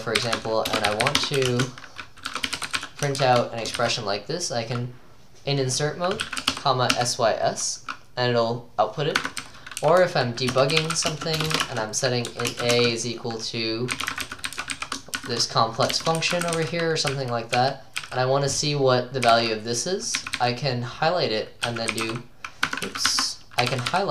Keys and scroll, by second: 0.0-3.8 typing, 6.0-7.5 typing, 9.2-20.4 typing, 21.4-24.1 typing.